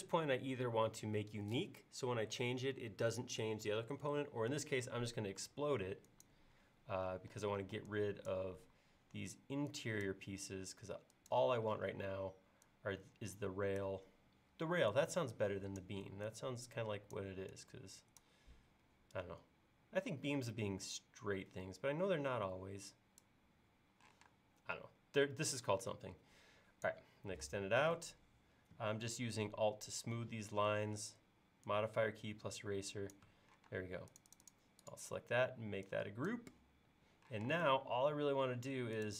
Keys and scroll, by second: 7.6 e, 24.2 p, 27.5 e, 33.7 space, 37.4 m.